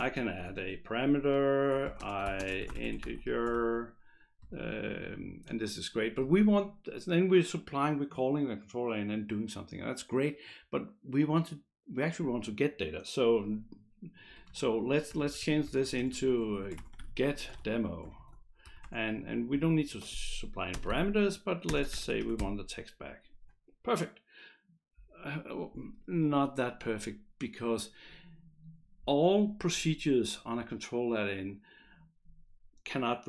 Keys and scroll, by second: 0.0-0.6 typing, 1.6-4.0 typing, 14.5 ctrl+Left, 15.1-18.8 typing, 18.6 Right, 20.8-22.9 typing.